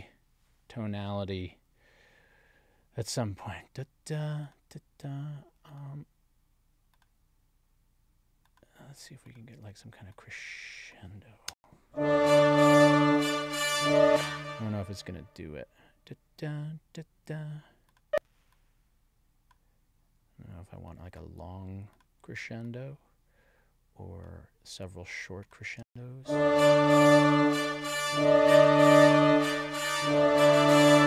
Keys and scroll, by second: 11.5 space, 13.9 space, 25.8 space.